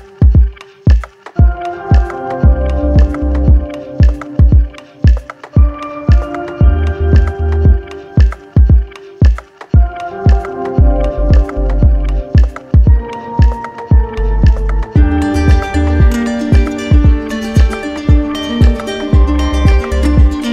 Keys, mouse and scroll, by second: 0.0 click, 1.4 click, 2.3 shift+click, 4.1 click, 5.3 shift+click, 6.3 click, 8.7 click, 9.6 click, 12.2 click, 17.9 click, 18.6 click, 19.3 click.